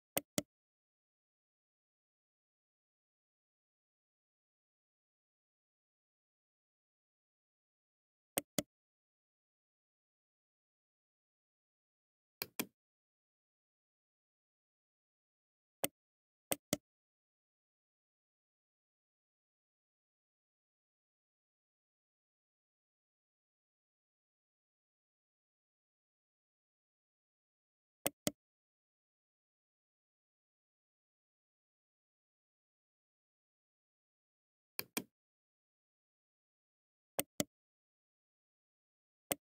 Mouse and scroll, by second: 0.0 right click, 12.3 click, 15.6 right click, 16.3 right click, 34.2 click, 37.0 right click, 39.1 right click.